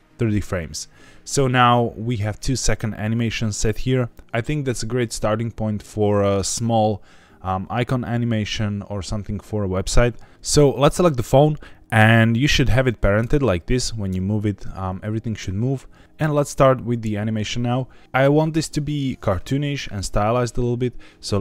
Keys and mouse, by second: 10.9 click, 21.2 click.